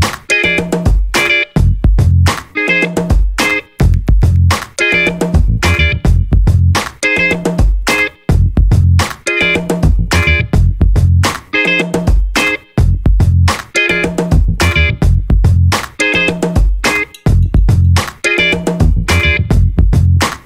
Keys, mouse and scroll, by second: 0.6 shift+8, 2.0 z, 2.9 0, 6.2 scroll down 2, 7.2 click, 8.8 click, 10.9-17.5 typing, 19.6 Return.